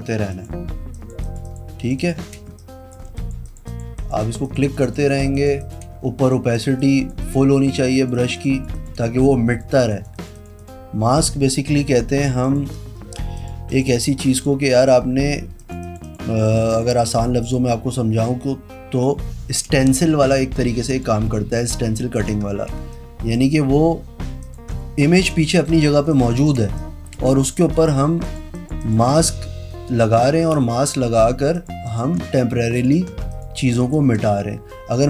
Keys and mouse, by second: 0.4 click, 1.1 click, 1.4 click, 1.6 click, 1.9 click, 2.1 click, 2.6 space, 2.7 click, 3.3 click, 3.6 click, 3.8 click, 4.1 click, 4.3 click, 4.6 click, 4.8 click, 5.2 click, 5.5 click, 5.7 click, 6.1 space, 6.3 click, 6.9 click, 7.4 click, 7.7 click, 8.1 click, 8.3 click, 8.5 click, 8.7 click, 8.9 click, 9.1 space, 9.4 click, 10.1 click, 10.3 click, 10.7 click, 11.8-13.2 typing, 12.6 click, 13.5 click, 14.1 click, 14.4 click, 14.8 click, 15.5 ], 15.7 click, 15.9 click, 16.2 click, 16.5 ], 16.9 click, 17.3 click, 17.5 click, 18.5 ], 19.9 space, 20.1 click, 21.0 click, 22.9 space, 25.4 shift+click, 26.2 click, 26.6 click, 26.8 space, 26.9 click, 27.6 click, 27.9 click, 28.4 click, 28.7 click, 28.9 click, 30.5 space, 30.7 click, 31.7 click, 32.0 click, 32.9 shift+click, 33.4 shift+click, 34.0 click.